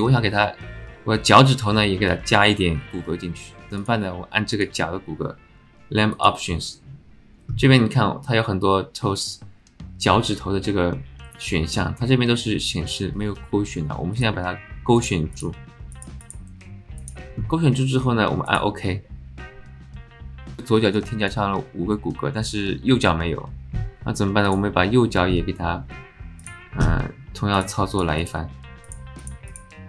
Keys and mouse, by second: 6.1-20.3 drag, 20.8 middle click, 21.1 shift+middle click, 26.5-29.8 drag.